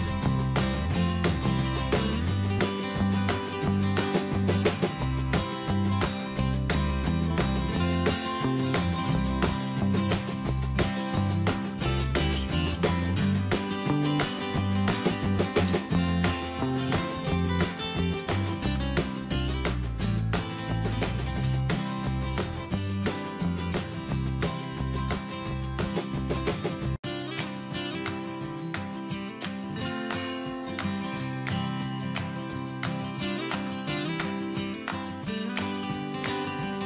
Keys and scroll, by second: 15.9 BackSpace, 17.1 Return, 22.8 alt+Tab, 26.1 ctrl+a, 26.4 ctrl+c, 29.6 Tab.